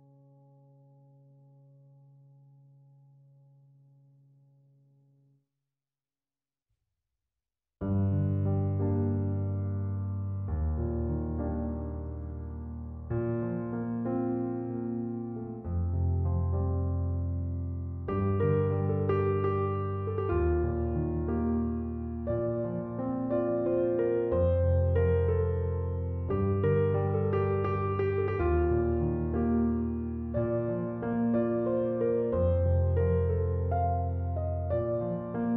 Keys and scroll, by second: 22.9 typing.